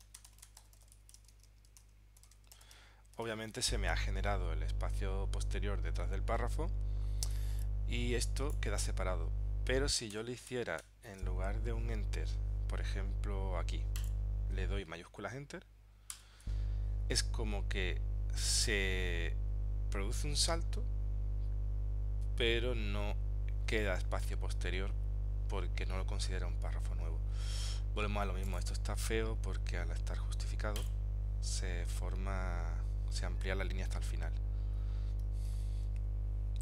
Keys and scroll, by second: 16.2 shift+Return, 35.6 super+z.